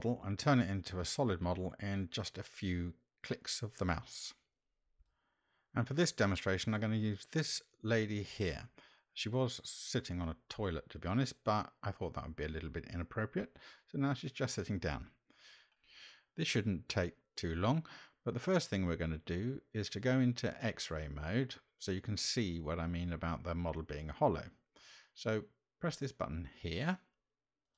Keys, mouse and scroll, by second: 16.9-18.5 shift+middle drag, 19.2-20.1 middle drag, 21.4-22.0 shift+middle drag, 22.7 middle click.